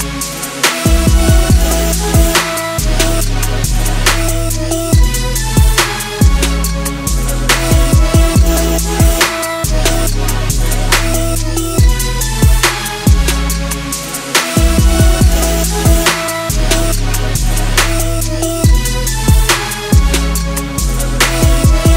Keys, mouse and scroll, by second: 2.1 click, 8.1 ctrl+s, 9.9 click.